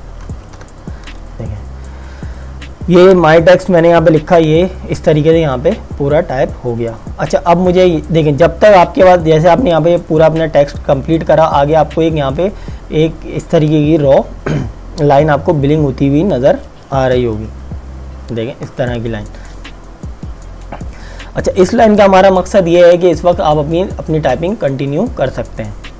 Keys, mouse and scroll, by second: 0.0-1.1 typing, 17.2 super+Num_Lock, 17.5 =.